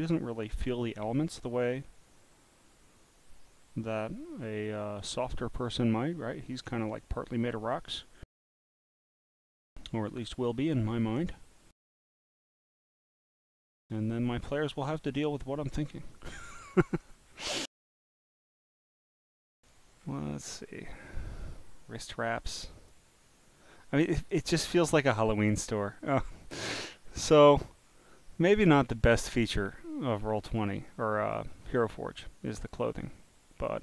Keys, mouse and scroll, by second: 12.4 click, 16.4-17.1 scroll down 3, 17.9-18.9 scroll down 6, 20.0 scroll up 5, 20.5 scroll down 2, 21.4 click, 22.5 click, 24.4 click, 25.0-25.6 scroll, 26.2-27.0 scroll, 27.0 scroll down 5, 27.9 scroll down 4, 28.5 scroll down 3, 29.7 click, 30.5 click, 30.9 scroll down 1, 31.0 scroll down 1, 31.5 scroll down 1, 31.6 scroll, 33.5 click.